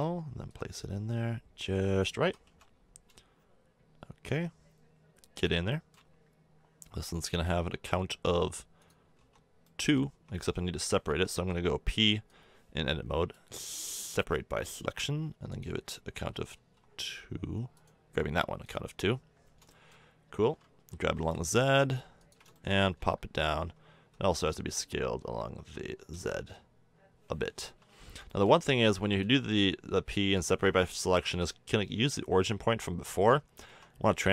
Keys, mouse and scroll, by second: 0.5-2.5 drag, 2.2 s, 7.3-8.5 drag, 9.2 Tab, 10.1 Tab, 11.3 p, 14.3 Tab, 16.5 ctrl+z, 19.3 middle click, 20.8 g, 22.7-23.1 middle drag, 24.1 s, 29.0 s, 33.6 Tab.